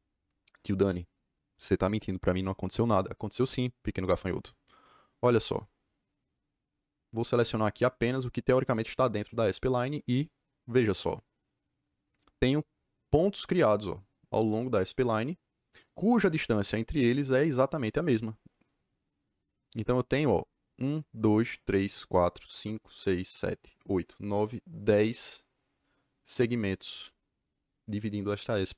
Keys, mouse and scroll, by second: 5.4 click, 10.0 click.